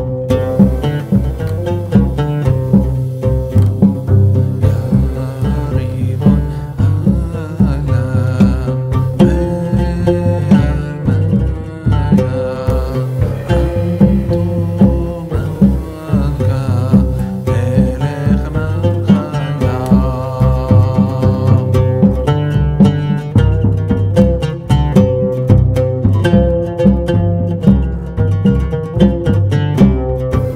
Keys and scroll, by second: 11.5 d.